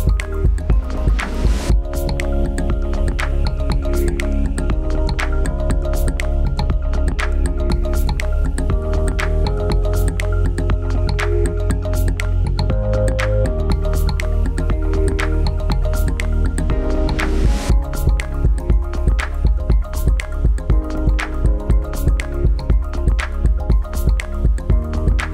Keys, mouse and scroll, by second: 4.4 click, 8.1 click, 11.2 click, 23.1 right click, 24.2 click.